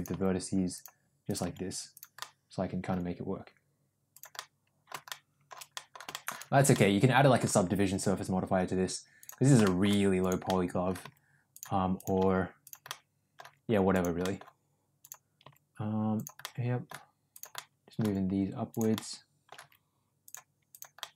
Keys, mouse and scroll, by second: 0.0 g, 1.4 g, 2.1 middle click, 2.8 g, 4.4 middle click, 5.0 middle click, 5.8 middle click, 6.1 middle click, 6.7 middle click, 7.4 g, 9.7 middle click, 10.4 middle click, 10.9 g, 12.1 g, 12.8 middle click, 13.3 g, 14.1 middle click, 14.9 click, 15.3 g, 16.4 middle click, 17.2 click, 17.4 middle click, 17.9 g, 18.8 middle click, 19.5 g, 20.7 click, 20.9 middle click.